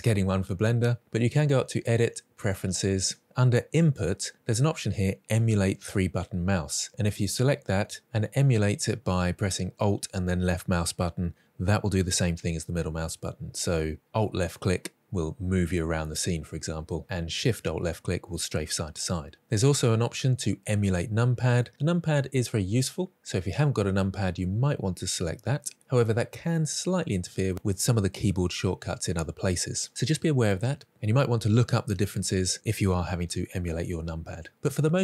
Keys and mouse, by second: 1.2-2.0 drag.